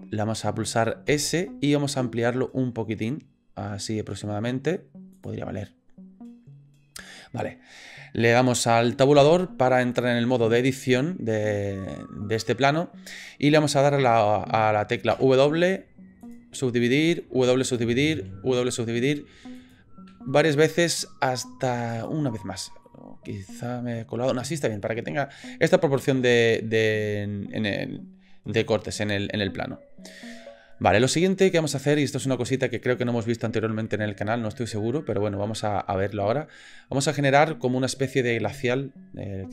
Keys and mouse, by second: 1.1 s, 5.6 middle click, 9.2 Tab, 15.1 w, 16.9 w, 19.2 w, 20.1 w, 22.8-24.4 middle drag, 24.8 middle click, 31.0 middle click.